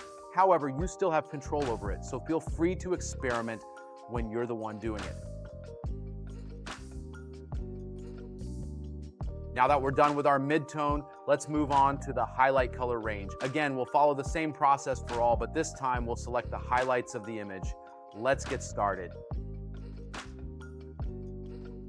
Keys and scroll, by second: 5.9 space, 7.5 space, 8.6 space, 10.9 space, 12.2 space, 20.8 space, 21.5 space.